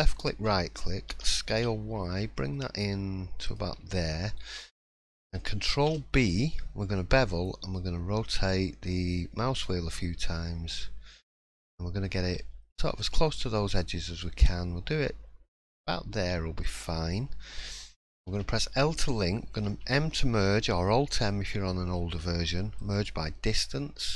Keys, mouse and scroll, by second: 3.7-4.7 scroll down 3, 4.1-4.7 scroll up 2, 4.7 middle click, 4.7-5.3 scroll up 3, 5.7 ctrl+b.